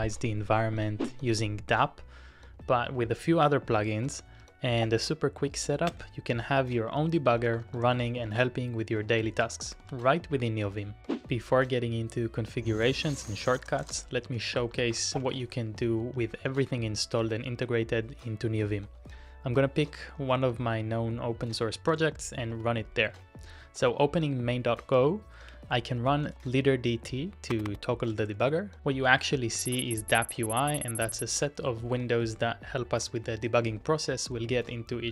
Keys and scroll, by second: 5.8 alt+space, 6.4-10.3 typing, 13.0-16.6 typing, 16.6 Return, 21.3-22.8 typing, 25.6 alt+space, 25.8-28.8 typing, 28.8 ctrl+d, 29.3 ctrl+d, 29.7 ctrl+d, 31.0 ctrl+u, 34.5 ctrl+u.